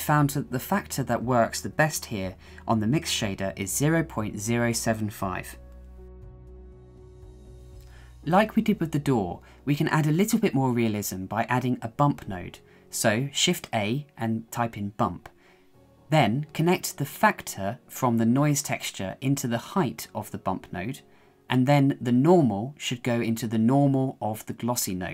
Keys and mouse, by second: 0.1-1.2 drag, 1.3 click, 2.5 middle click, 3.9-5.1 drag, 5.3 middle click, 6.0 shift+middle click, 7.2 shift+middle click, 7.4 shift+middle click, 8.7 shift+middle click, 9.3 shift+middle click, 10.3 click, 11.8 shift+middle click, 12.9 shift+a, 19.0-23.0 drag, 24.8-25.1 drag.